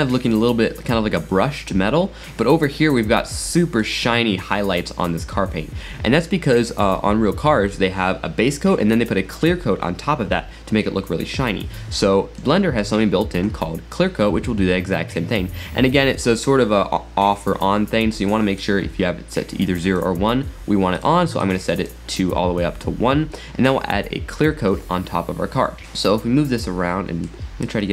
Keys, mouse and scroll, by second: 2.9-3.3 scroll up 3, 3.4 middle click, 4.4 scroll down 2, 4.8-7.8 middle drag, 12.4-15.5 middle drag, 18.6-21.0 drag, 21.4-24.7 drag, 25.8-27.9 middle drag.